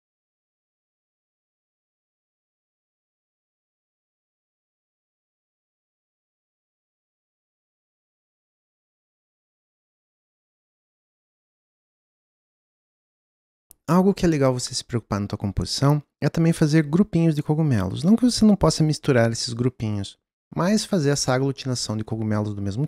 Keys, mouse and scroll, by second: 0.1 middle click, 0.7 click, 1.5 click, 1.9 s, 2.3 middle click, 2.6 g, 3.4 middle click, 3.6 click, 3.8 shift+d, 4.4 g, 4.9 g, 5.8 middle click, 5.9 g, 6.1 middle click, 6.2 scroll up 2, 6.3 middle click, 6.4 scroll down 1, 6.5 middle click, 6.9 g, 8.1 middle click, 8.3 scroll down 1, 8.4 shift+middle click, 8.9 g, 10.9 g, 12.1 g, 13.0 click.